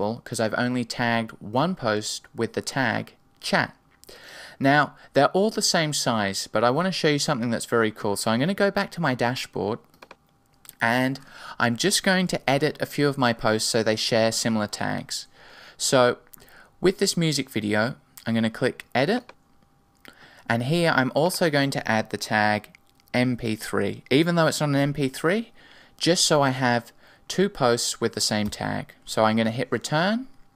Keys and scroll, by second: 12.2 Right, 28.4 Return.